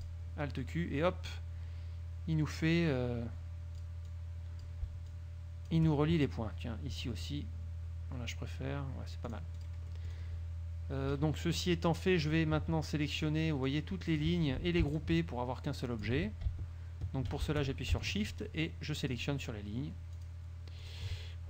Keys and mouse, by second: 0.1 click, 2.5 click, 3.9 click, 5.3-6.1 shift+drag, 7.1 click, 9.5 click, 11.3 KP_Subtract, 12.1 click, 13.3 click, 13.8 click, 14.6 ctrl+z, 15.1 ctrl+shift+click, 15.8 click, 16.3 ctrl+z, 18.2 shift+click, 19.2 shift+click, 20.3 shift+click, 20.9 shift+click.